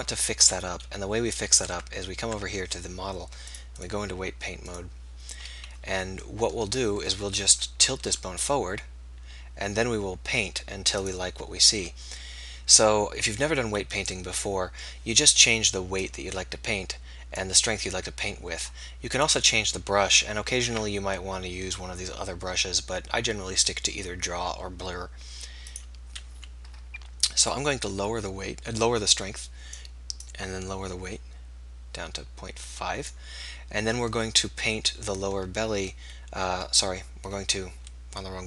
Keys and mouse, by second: 1.8 Tab, 1.8-2.9 drag, 2.4 Tab, 2.9 right click, 3.5 click, 4.9 click, 7.5 KP_3, 8.1 r, 14.8-21.2 drag, 27.5-34.0 drag.